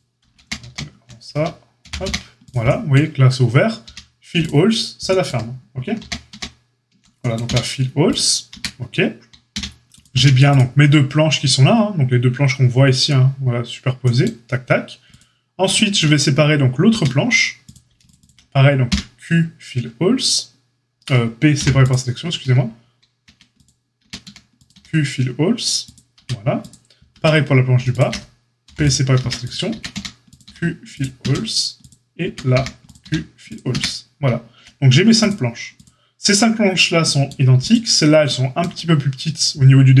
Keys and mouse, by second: 0.4 ctrl+z, 0.5 ctrl+z, 1.8 g, 3.8 q, 5.9 ctrl+z, 6.3 ctrl+z, 7.4 q, 8.5 Tab, 9.5 q, 10.1 q, 15.0 click, 15.1-18.1 middle drag, 16.9 Tab, 18.1 alt+shift+click, 18.2-27.9 alt+middle drag, 18.8 q, 21.5 p, 23.2 Tab, 24.0 Tab, 24.2 a, 24.7 q, 26.1 Tab, 27.1 Tab, 27.9 alt+shift+click, 28.0-35.7 middle drag, 28.6 p, 29.1 Tab, 29.3 click, 29.7 Tab, 29.9 a, 30.4 q, 31.2 Tab, 31.7 click, 32.2 Tab, 32.5 a, 33.0 q, 33.7 Tab, 35.7 click, 35.8-40.0 middle drag.